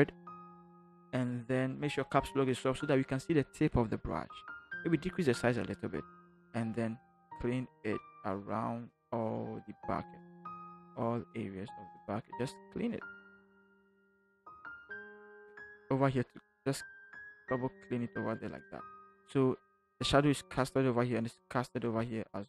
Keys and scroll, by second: 3.3 Caps_Lock, 4.9 [.